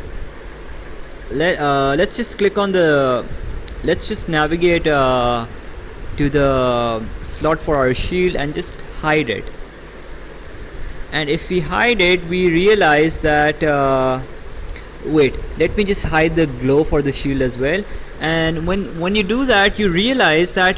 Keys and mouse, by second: 0.6 click, 7.9 click, 9.5 click, 17.3 click.